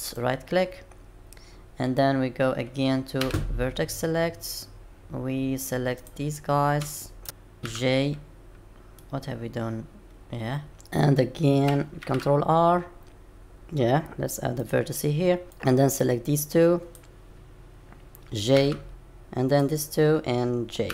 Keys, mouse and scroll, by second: 3.2 1, 6.0 click, 7.2 shift+click, 7.6 j, 9.0 middle click.